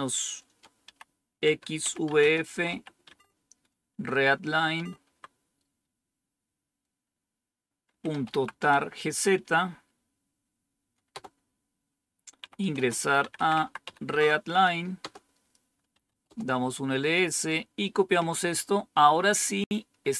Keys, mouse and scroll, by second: 0.0-3.1 typing, 4.7 Tab, 5.0 Tab, 7.8-8.8 typing, 11.1 Return, 12.1-14.3 typing, 15.0 Return, 16.0-16.7 typing, 19.3-20.1 drag.